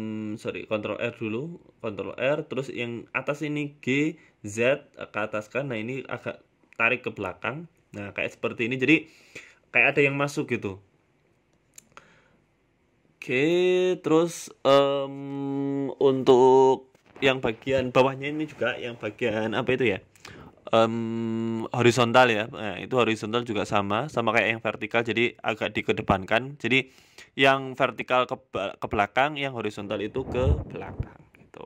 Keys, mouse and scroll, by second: 1.0 click, 2.4 click, 4.2 g, 5.7 click, 6.8 g, 7.7 scroll down 4, 7.8 Tab, 8.0 middle click, 8.8 scroll down 2, 9.0 scroll up 2, 9.0 middle click, 10.0 scroll down 1, 10.2 z, 11.2 middle click, 13.8 middle click, 14.0 Tab, 14.2 middle click, 14.5 scroll up 2, 14.9 ctrl+r, 17.0 KP_1, 17.4 scroll up 4, 17.7 shift+middle click, 18.4 ctrl+r, 20.7 middle click, 21.2 scroll down 1, 21.7 middle click, 22.5 right click, 23.2 alt+shift+right click, 24.4 g, 26.1 Tab, 26.3 middle click, 26.5 middle click, 26.7 scroll down 4, 26.9 middle click, 27.9 scroll down 2, 28.0 middle click, 28.8 KP_1, 29.7 s, 30.7 scroll down 2, 31.0 scroll down 1, 31.0 scroll up 1, 31.2 shift+middle click.